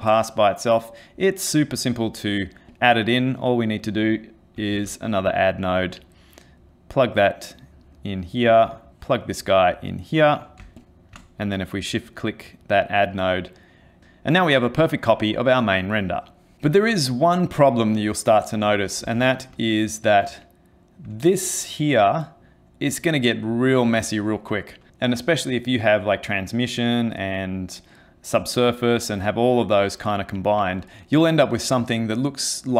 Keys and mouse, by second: 0.1 middle click, 1.2 click, 2.7 click, 3.4 click, 4.8 shift+d, 7.0 click, 10.8 ctrl+shift+click, 11.9 middle click, 19.1 ctrl+space, 19.9 middle click, 20.4 ctrl+middle click, 21.8 middle click.